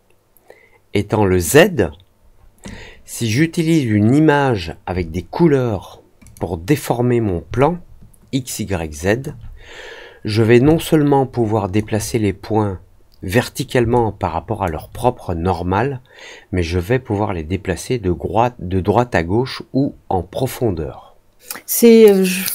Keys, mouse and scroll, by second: 6.2 click, 7.5-9.1 alt+drag, 10.6-11.7 alt+drag, 13.9 alt+click.